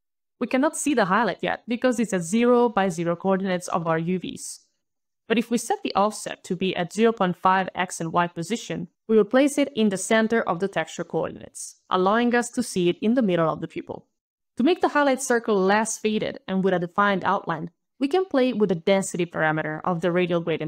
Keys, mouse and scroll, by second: 0.4 alt+click, 0.4 alt+right click, 0.8 alt+right click, 1.9 alt+middle click, 2.0 alt+middle click, 2.1 alt+middle click, 3.1 alt+right click, 5.3 alt+KP_Decimal, 5.3 alt+click, 5.3 alt+scroll, 5.5 alt+KP_5, 5.9 alt+KP_Enter, 7.1 alt+click, 7.2 alt+click, 8.0 alt+KP_5, 8.7 alt+BackSpace, 9.1 alt+KP_Decimal, 9.4 alt+KP_5, 10.5 alt+KP_Enter, 11.9 alt+click, 11.9 alt+scroll down 10, 12.3 alt+right click, 13.8 alt+click, 14.2 alt+click, 14.4 alt+click, 16.8 alt+right click, 18.9 alt+click, 20.5 alt+click.